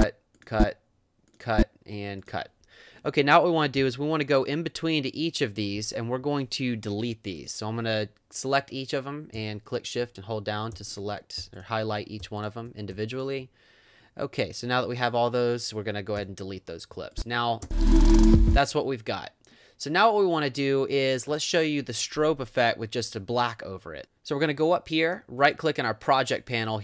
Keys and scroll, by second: 3.8 v, 16.2 BackSpace, 17.6 space.